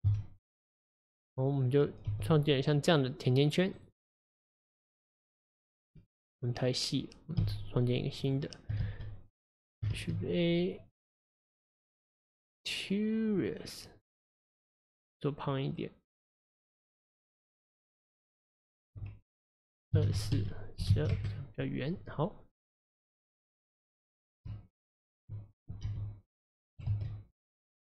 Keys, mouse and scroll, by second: 0.1 KP_Divide, 2.2 g, 2.9-3.8 scroll up 4, 3.8-6.2 right drag, 6.2 click, 6.6 click, 7.5 x, 8.3 click, 8.9 shift+s, 10.0 shift+a, 15.8-18.8 drag, 18.9-21.9 drag, 22.0 click, 23.2 click, 24.0 click, 24.7 shift+drag, 25.0 shift+click, 25.9 g, 27.0 ctrl+z, 27.4-27.9 middle drag.